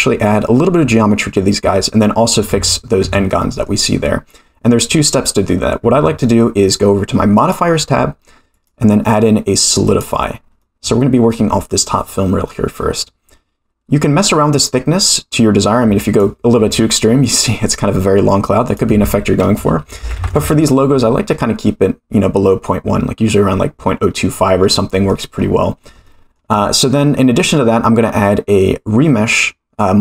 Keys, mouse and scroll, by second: 2.5 Tab, 3.0 Tab, 3.4 middle drag, 7.3 click, 8.5-10.0 drag, 10.6-11.3 middle drag, 14.0-16.2 drag, 16.5-17.1 scroll down 6, 18.6-21.0 drag, 23.8-24.6 scroll up 4, 24.6-25.1 middle drag, 25.4-25.8 scroll up 2, 26.1-26.4 shift+middle drag, 27.4-30.0 drag.